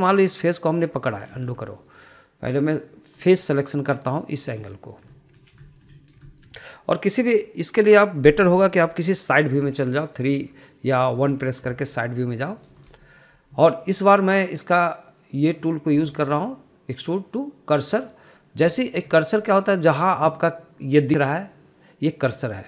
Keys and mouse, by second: 0.0 shift+middle click, 0.5 middle click, 0.8 shift+middle click, 1.7 click, 2.7 ctrl+z, 3.1 middle click, 4.0 click, 4.5 click, 5.5 click, 6.0-6.3 middle drag, 6.5 shift+middle click, 7.0 shift+middle click, 7.3 middle click, 7.6 shift+middle click, 10.8 KP_3, 12.5 KP_1, 13.8 shift+middle click, 14.4 shift+middle click, 16.9-19.7 drag, 20.1 shift+middle click, 20.4 shift+middle click.